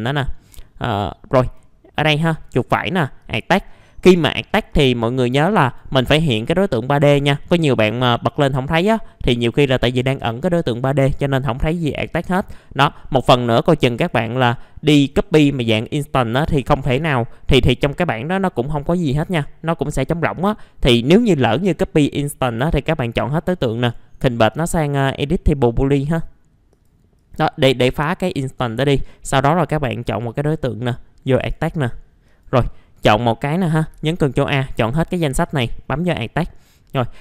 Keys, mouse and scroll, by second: 0.0 middle click, 0.5-2.0 drag, 2.0 right click, 3.2-16.5 drag, 17.0 right click, 26.7 click, 30.0 right click, 31.4 click, 33.9 ctrl+a, 35.4-36.6 drag.